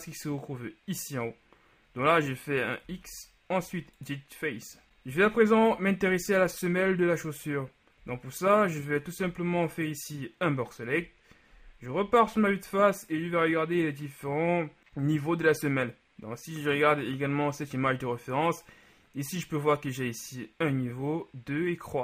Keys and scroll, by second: 3.0 x, 5.7 shift+KP_3, 8.1 z, 9.3 b, 11.1 KP_1.